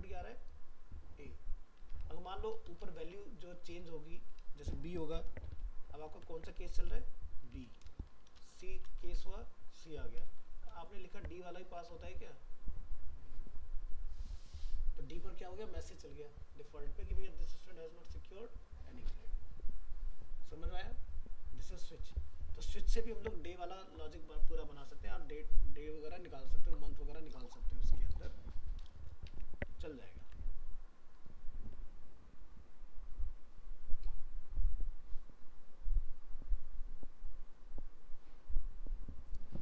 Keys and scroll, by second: 6.1 ctrl+s, 6.6 alt+Tab, 8.7 ctrl+s, 9.1 alt+Tab, 11.1 ctrl+s, 11.8 alt+Tab, 29.3 alt+Tab, 30.2 ctrl+s.